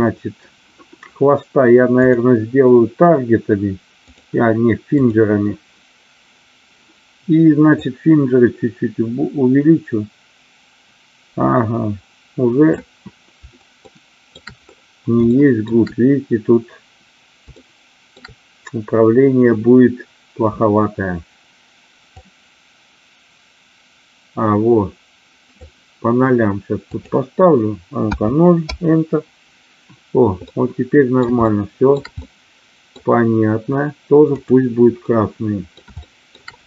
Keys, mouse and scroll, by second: 2.1-4.1 drag, 4.8 click, 7.8-12.8 drag, 13.9 shift+middle click, 15.3 shift+middle click, 17.6 shift+middle click, 22.0-26.0 drag, 26.9-29.2 drag, 30.5-31.2 middle drag, 31.5-31.8 shift+middle drag, 32.3-32.9 middle drag, 34.4 click, 35.0-35.7 middle drag, 36.0 shift+middle drag.